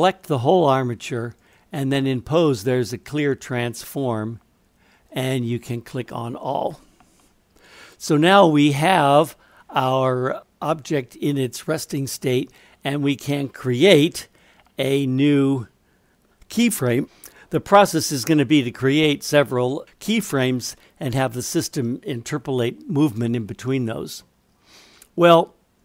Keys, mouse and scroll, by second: 1.4-5.3 drag.